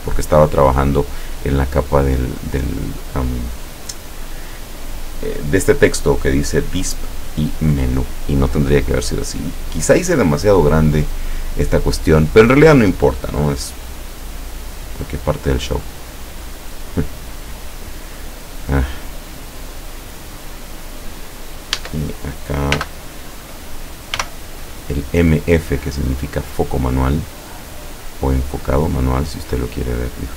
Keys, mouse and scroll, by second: 14.4 click, 16.5 click, 20.5 click, 21.8 Caps_Lock, 22.8 m, 24.3 f, 26.8 click, 29.0 click.